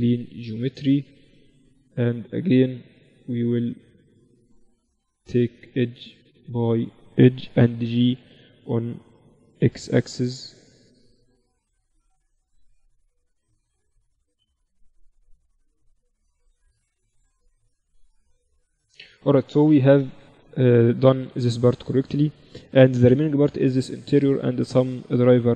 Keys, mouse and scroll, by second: 1.3-3.9 middle drag, 3.9-5.8 right drag, 4.7-7.9 drag, 6.3 right click, 7.9 right click, 7.9 g, 9.4 g, 10.5-12.2 middle drag, 12.2-14.3 right drag, 14.2 g, 16.4 middle click, 19.1-20.1 drag, 20.1 KP_1, 20.8 z, 21.1 click, 21.5 Tab, 22.1 z, 25.4 click.